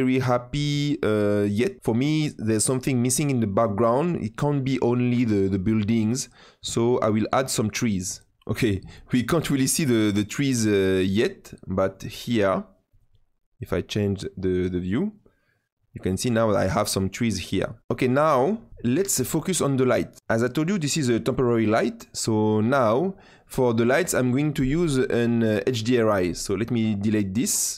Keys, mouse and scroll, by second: 6.7-7.1 scroll up 4, 7.1-8.4 scroll down 5, 13.1 click, 14.5 click, 27.3-27.6 drag, 27.7 click.